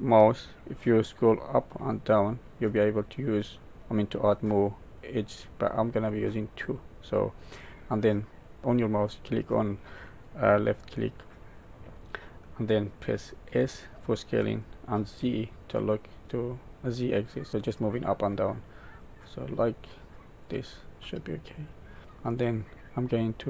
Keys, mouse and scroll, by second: 21.0 middle click.